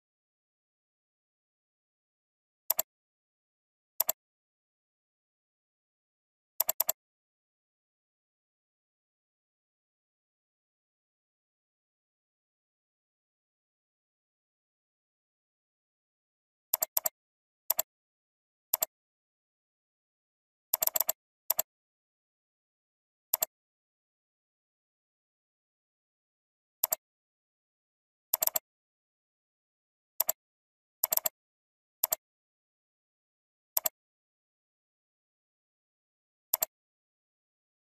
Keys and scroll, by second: 6.8 alt+space, 14.8 ctrl+j, 19.4 ctrl+t, 20.9 ctrl+space, 28.6 alt+space.